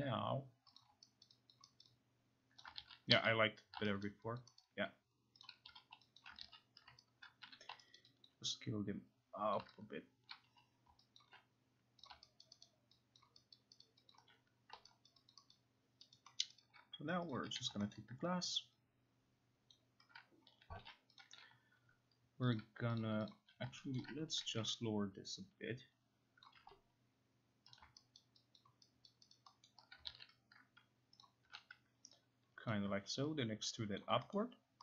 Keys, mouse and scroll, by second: 0.8 click, 1.3 alt+right click, 1.5 alt+click, 2.4 alt+right click, 2.6 alt+click, 2.8 ctrl+z, 3.1 ctrl+z, 4.1 alt+right click, 4.4 alt+click, 5.2 alt+right click, 5.5 click, 5.7 q, 6.2 alt+click, 6.4 ctrl+z, 7.3 right click, 7.5 t, 8.0 alt+right click, 8.3 alt+click, 9.6 click, 10.3 click, 10.5 q, 11.2 alt+click, 12.1 click, 12.4 alt+right click, 12.7 alt+right click, 13.2 alt+click, 13.9 alt+right click, 14.1 alt+click, 14.1 alt+right click, 14.8 alt+click, 15.3 alt+right click, 16.2 alt+right click, 16.4 alt+middle click, 16.6 alt+right click, 17.4 click, 17.5 q, 18.0 alt+middle click, 18.5 alt+click, 19.7 alt+click, 20.4-21.3 typing, 21.2 click, 22.6 click, 23.0 click, 23.3 click, 24.0 alt+middle click, 24.7 e, 26.5 click, 26.6 q, 27.8 click, 28.2 alt+right click, 28.6 alt+click, 29.3 alt+right click, 29.7 alt+middle click, 30.1 ctrl+z, 31.2 click, 31.5 q, 32.7 click, 34.0 ctrl+click, 34.4 middle click.